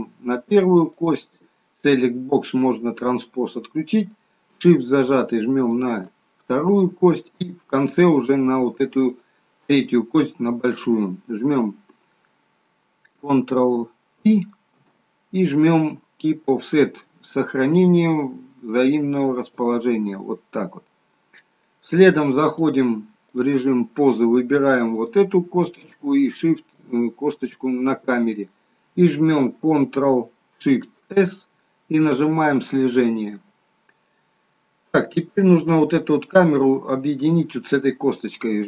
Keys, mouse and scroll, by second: 5.6 shift+click, 9.1 shift+click, 14.7 ctrl+p, 22.6 click, 24.8 click, 26.8 shift+click, 31.1 ctrl+shift+c.